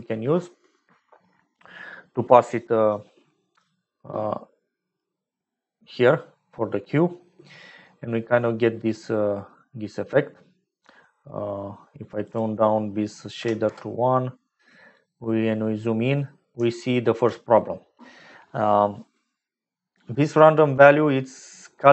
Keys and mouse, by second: 4.8-6.4 drag, 12.2-14.4 drag, 16.7 shift+click.